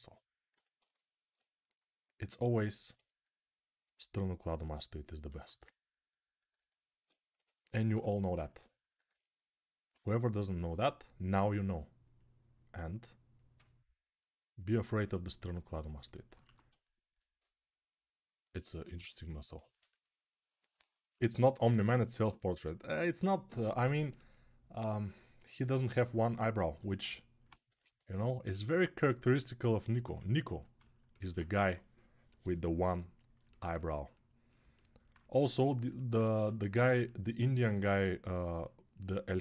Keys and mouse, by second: 0.3 g, 4.2-15.9 right drag, 5.1 1, 7.5 g, 7.5 [, 7.7 [, 16.2 1, 16.4-26.0 ctrl+right drag, 18.3 typing, 26.5 g, 27.5 g, 30.3-37.8 alt+shift+right drag, 36.1 1, 37.5 1.